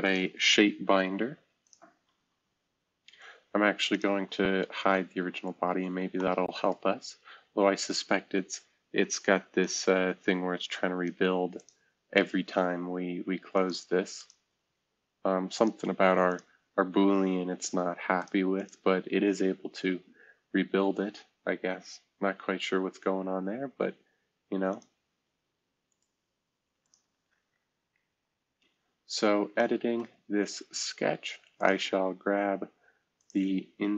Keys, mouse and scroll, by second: 3.8 click, 4.2 space, 5.1 scroll down 2, 5.6-6.2 scroll up 2, 6.7 scroll down 2, 7.3-8.3 scroll up 2, 9.5-11.0 drag, 22.5 scroll down 2, 23.0-23.5 scroll up 2, 24.6 click, 28.1 scroll down 1, 28.6-29.4 scroll up 3, 31.5 click, 33.1 middle click.